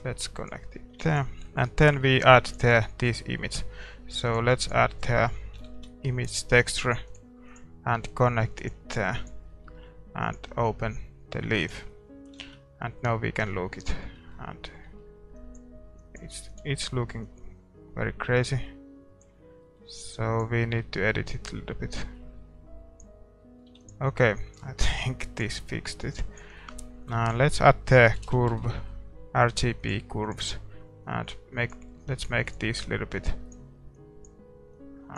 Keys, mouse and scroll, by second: 11.7 click, 12.4 shift+z, 13.2-16.7 middle drag, 16.7 ctrl+s, 16.7-19.0 drag, 19.6-23.1 middle drag, 23.0 click, 23.4-30.2 middle drag, 23.8 ctrl+s, 24.3-30.2 drag, 30.2 shift+a, 30.4-35.1 drag.